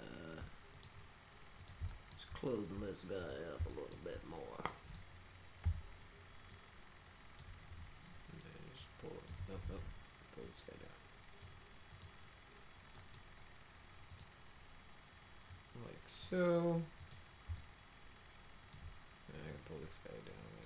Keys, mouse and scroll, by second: 0.7 ctrl+click, 1.6 ctrl+click, 1.9 alt+middle click, 3.2 ctrl+click, 3.7 alt+middle click, 4.7 middle click, 5.6 r, 6.5 click, 7.7 w, 8.8 click, 9.4 ctrl+z, 9.6 ctrl+z, 10.4 click, 11.9 click, 13.0 middle click, 14.1 click, 15.5 click, 17.0 click, 17.6-18.7 alt+middle drag, 19.5-20.6 drag.